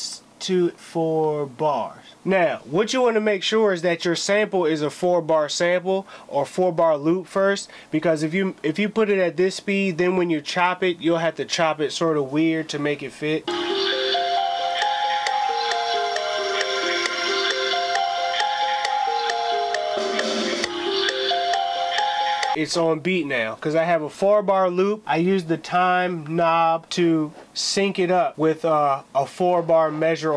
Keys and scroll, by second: 12.3 space, 12.5 space, 13.8 space, 14.2 ctrl+i, 14.3 ctrl+m.